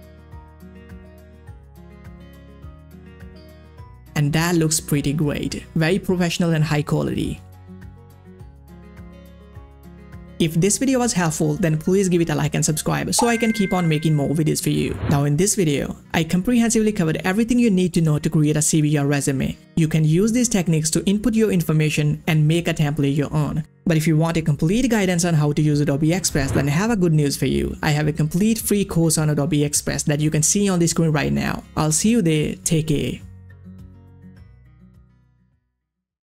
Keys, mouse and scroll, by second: 1.9-2.5 scroll up 1, 2.5-11.1 drag, 12.4 click.